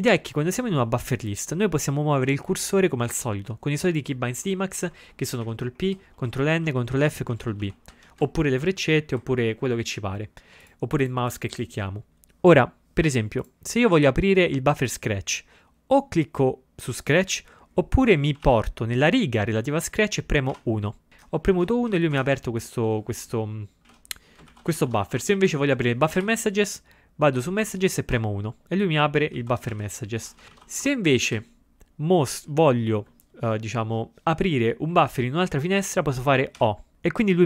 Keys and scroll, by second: 2.5 Down, 3.4 Down, 5.5 ctrl+p, 5.9 ctrl+p, 6.3 ctrl+n, 6.4 ctrl+n, 6.8 ctrl+p, 7.0 c, 9.2 Up, 18.5 ctrl+a, 20.6 1, 21.6 ctrl+x, 22.0 b, 23.9 ctrl+x, 23.9 ctrl+b, 24.6 ctrl+x, 24.7 o, 28.2 1, 29.4 ctrl+x, 29.8 ctrl+b, 32.3 Down, 36.6 o.